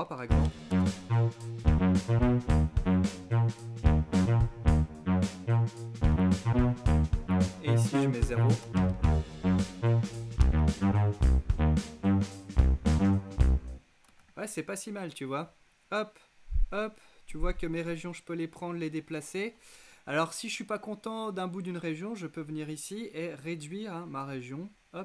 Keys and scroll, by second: 0.0 shift+Return, 0.3 space, 8.2 shift+à, 9.9 Return, 13.6 space.